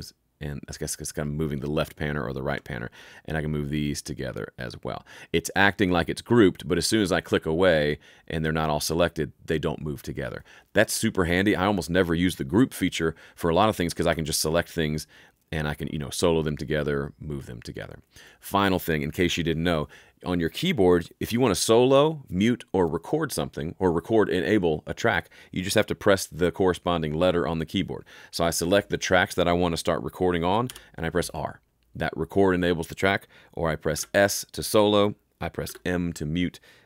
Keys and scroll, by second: 30.6 r, 33.9 s, 35.6 m.